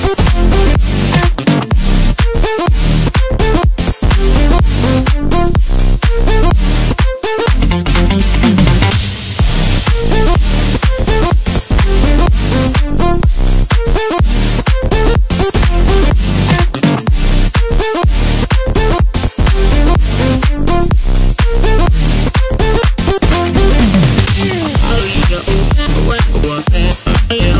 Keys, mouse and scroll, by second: 0.2 ctrl+KP_2, 0.4 ctrl+KP_2, 0.6 ctrl+KP_2, 0.7 ctrl+KP_2, 1.7 KP_3, 3.1-4.5 scroll up 1, 4.5 click, 5.8 click, 7.2 KP_1, 9.3 e, 15.1-16.9 scroll down 4, 19.5 s, 23.0 e.